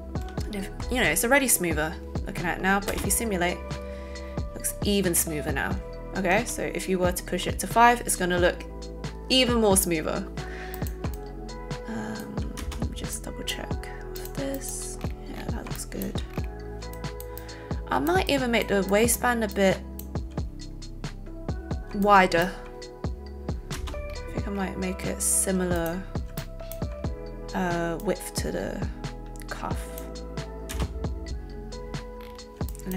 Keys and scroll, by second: 2.9 space, 6.3 space, 12.5 alt+space, 23.7 space, 25.5 a, 26.2 alt+a, 30.7 space.